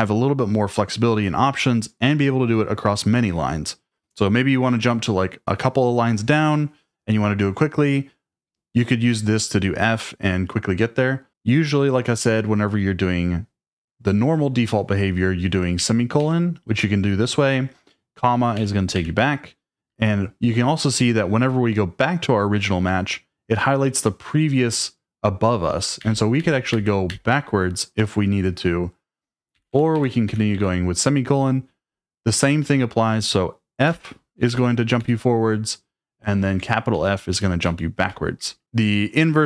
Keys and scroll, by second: 15.8 ;, 18.6-18.9 typing, 26.0-27.2 typing, 29.5-30.5 typing, 33.9 f, 36.9-38.8 typing.